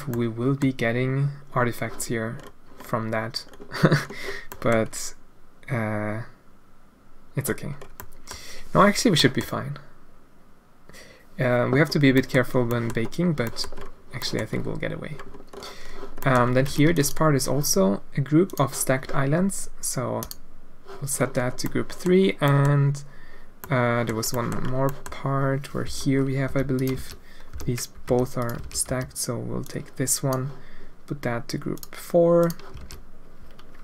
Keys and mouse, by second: 0.1 middle click, 4.6 click, 8.1 click, 9.3 middle click, 12.2 middle click, 12.7 middle click, 13.6 middle click, 14.3 middle click, 16.3 middle click, 16.7 alt+a, 16.8 b, 20.2 click, 21.6 middle click, 22.6 middle click, 23.7 middle click, 24.3 middle click, 25.0 middle click, 25.8 l, 26.4 g, 26.9 alt+a, 27.5 l, 28.0 g, 28.6 alt+a, 28.8 b, 32.4 click, 32.8 alt+a.